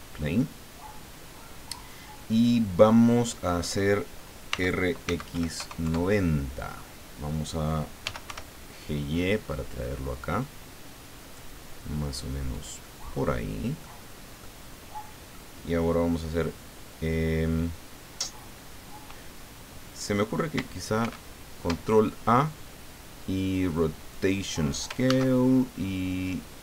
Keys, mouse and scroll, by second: 4.5 r, 5.0 x, 5.3 KP_9, 5.6 KP_0, 5.8 KP_Enter, 8.0 g, 8.2 y, 12.5-14.0 drag, 14.4-15.5 drag, 21.0 ctrl+a, 24.1 click, 25.0 ctrl+a.